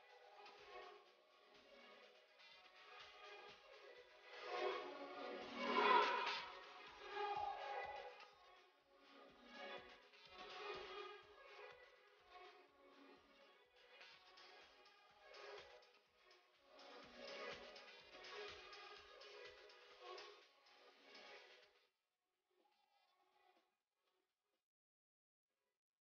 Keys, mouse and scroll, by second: 0.9 click, 2.8 click, 6.8 click, 14.6 click, 16.6 click, 18.1 click, 21.4-22.0 scroll up 1, 22.2 click, 24.2-24.7 scroll down 1, 24.7 click, 25.0 scroll down 1, 25.6 click.